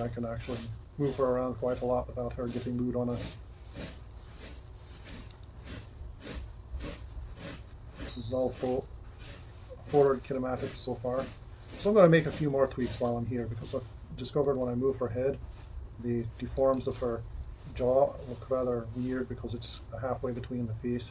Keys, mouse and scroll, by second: 4.2 r, 5.5 r, 14.5 r.